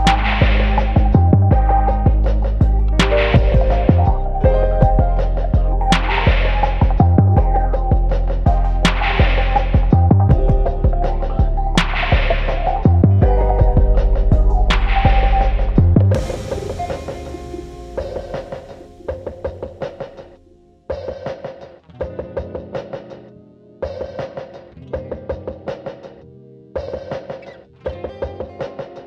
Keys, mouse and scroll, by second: 0.3 g, 1.3 click, 1.7 shift+click, 2.2 f, 2.4 Tab, 2.6 scroll down 1, 2.8 `, 3.4 alt+a, 3.6 `, 4.4 click, 4.5 `, 5.0 scroll up 1, 5.2-5.7 scroll down 1, 5.7 alt+click, 6.4 f, 6.7-7.0 scroll down 1, 7.5 Tab, 7.8 alt+click, 8.4 KP_Decimal, 8.6 scroll down 1, 10.5 scroll up 1, 11.6 click, 12.2 g, 14.6 alt+click, 14.9-15.6 scroll down 1, 17.6 x, 17.9-18.2 scroll down 1, 18.6 scroll up 1, 19.3 alt+click, 21.1 scroll up 1, 22.2 click, 22.7 x, 22.9 `, 23.5 click, 23.8 x, 24.2 alt+click, 24.4 scroll down 1, 24.7 ctrl+x, 25.4 scroll up 1, 25.6 `, 26.3 alt+click, 27.4 alt+click, 28.4 `, 28.7 scroll down 1, 28.8 `.